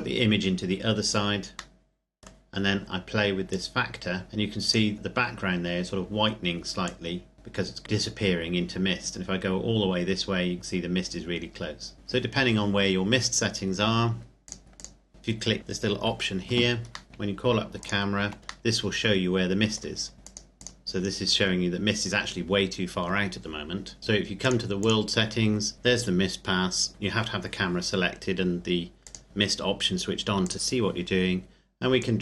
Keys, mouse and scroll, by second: 1.8 middle click, 2.5-3.4 scroll up 1, 3.4 click, 4.9-5.5 scroll down 1, 5.5-6.7 scroll up 1, 6.7 click, 11.9-13.6 scroll down 1, 14.4 click, 15.6 click, 16.5 Escape, 17.1 scroll down 1, 17.7 shift+click, 18.3-18.7 scroll down 1, 18.7 middle click, 22.8 click, 24.0 KP_Enter, 24.4 click, 29.0 click.